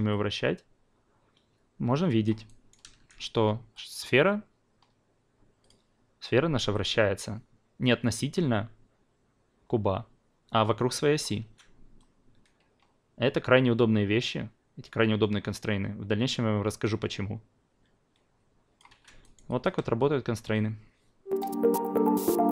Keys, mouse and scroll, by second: 2.2 click, 3.7 click, 5.6 click, 6.7-11.1 drag, 11.4 ctrl+z, 12.0-18.8 drag, 19.2 alt+right click, 19.4 alt+click.